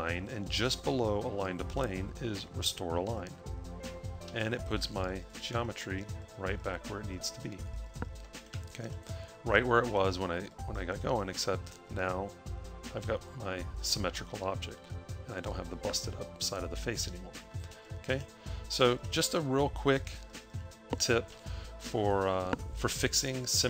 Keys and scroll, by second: 4.2 a, 17.0 a, 17.8 a.